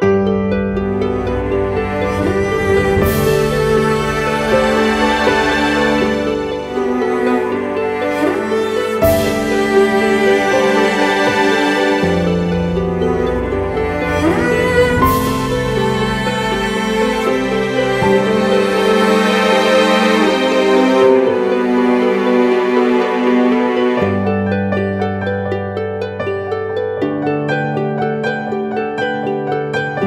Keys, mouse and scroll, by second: 7.3 ctrl+t, 10.0 shift+Return, 17.0 double click, 27.3-28.7 scroll up 1.